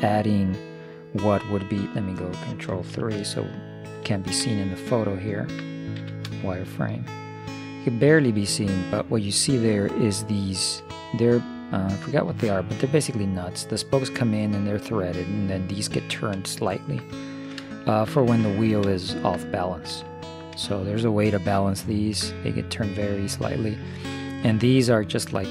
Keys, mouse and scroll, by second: 3.0 ctrl+KP_3, 4.2-8.5 middle drag, 6.1 z, 11.0-13.4 middle drag, 16.6-20.9 middle drag, 24.1 middle click.